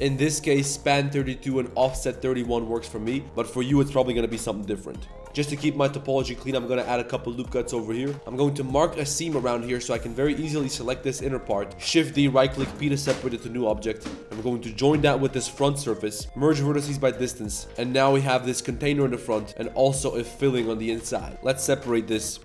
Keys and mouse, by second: 0.2 click, 1.7 click, 2.7 middle drag, 3.1 click, 3.1 middle click, 3.1 right click, 3.5 click, 3.5 middle click, 3.5 right click, 4.6 click, 4.6 middle click, 4.6 right click, 5.0 drag, 5.0 middle drag, 5.0 right drag, 5.2 ctrl+r, 5.3 ctrl+r, 7.1-7.4 middle drag, 7.6 middle drag, 7.8 Tab, 8.0 middle click, 8.1 ctrl+e, 8.1-13.7 typing, 8.3 ctrl+e, 9.2 middle drag, 11.0 middle drag, 11.3 middle drag, 13.1 Tab, 13.2 click, 14.0 middle click, 14.4 shift+click, 15.1 ctrl+j, 15.4 Tab, 15.7 a, 16.2 shift+w, 16.8 Tab, 16.9 click, 17.6 Tab, 17.6 g, 17.6 z, 17.7 Tab, 17.9 g, 19.1 z, 19.3 click, 19.5 Tab, 19.5 g, 19.6 drag, 20.2 click, 20.4 2, 20.7 click, 20.9 ctrl+z, 21.1 ctrl+z, 21.2 ctrl+z, 21.3 g, 21.8 middle click, 22.0 shift+middle drag, 22.2 Tab.